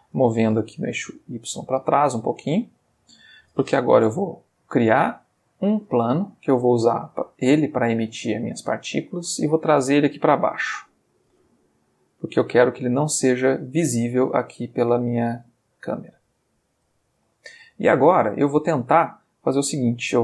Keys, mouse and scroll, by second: 0.3 g, 0.5 y, 1.6 click, 3.9 shift+a, 5.4 click, 6.1-9.2 middle drag, 10.7 g, 11.3 z, 12.2 click, 14.9 click, 17.4-18.3 shift+middle drag.